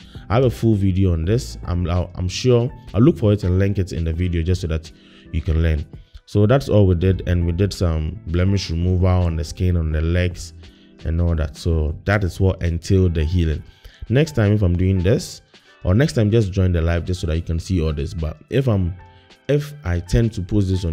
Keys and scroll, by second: 0.0 BackSpace, 0.4 BackSpace.